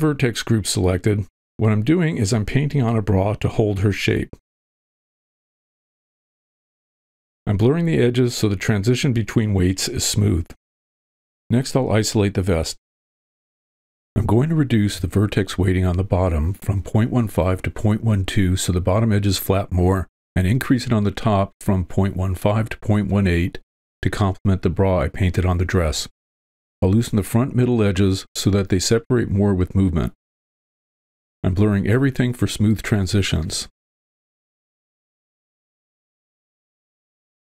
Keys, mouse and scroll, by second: 1.3 middle click, 2.4-3.7 drag, 3.7 middle click, 4.1 click, 4.4 middle click, 4.7 click, 5.0 middle click, 5.3 click, 5.8 click, 7.1 shift+space, 7.4 shift+space, 7.4 shift+space, 7.8 click, 8.4 click, 8.6 middle click, 8.9 click, 9.3 middle click, 9.5 click, 10.6 middle click, 11.1 alt+h, 11.5 click, 11.5 w, 12.0 ctrl+l, 12.7 shift+h, 13.2 v, 13.4 click, 14.0-15.2 drag, 15.8 g, 15.9 click, 16.5 f, 17.0 click, 17.5 middle click, 17.7 click, 18.0 middle click, 18.2 click, 18.6 middle click, 19.3 click, 20.3 f, 20.5 click, 21.0 middle click, 21.1 click, 21.3 middle click, 21.5 middle click, 22.0 click, 22.3 middle click, 23.6 click, 24.6 middle click, 25.6-26.7 drag, 26.8 middle click, 26.8 f, 28.2 f, 28.7 middle click, 29.2 click, 29.9 click, 30.6 click, 31.4 shift+space, 32.0 shift+space, 32.0 shift+space, 32.2 middle click, 32.5 click, 33.1 click, 33.5 middle click, 34.8 click, 35.1-36.4 drag, 36.9-37.4 drag.